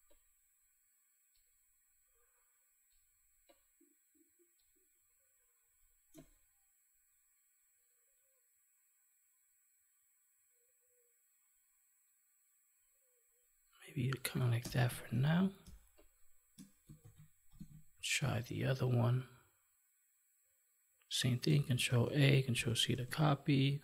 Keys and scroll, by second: 15.1 ctrl+1, 17.0 ctrl+s, 17.6 Tab, 21.8 ctrl+a, 22.9 ctrl+w.